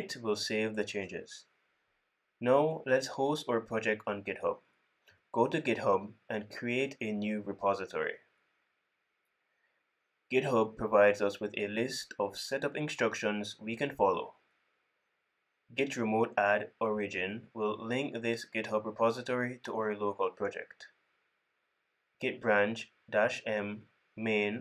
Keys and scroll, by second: 13.8 super+c, 16.4 super+c, 17.4 super+v, 21.7 super+c, 22.8 super+v.